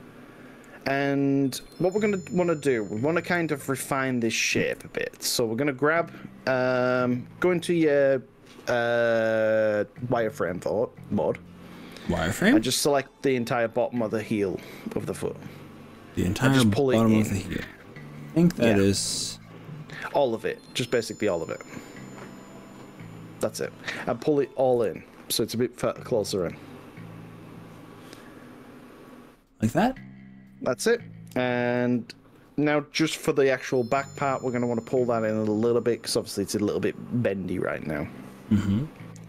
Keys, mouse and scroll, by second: 1.6 KP_1, 3.7 middle click, 4.8 KP_1, 6.8-8.0 shift+middle drag, 11.1 z, 13.7-19.8 drag, 20.3-21.6 middle drag, 22.0 click, 22.8-24.0 middle drag, 24.8 KP_1, 26.3 g, 31.8 click, 32.4-37.5 middle drag, 38.4-39.2 middle drag.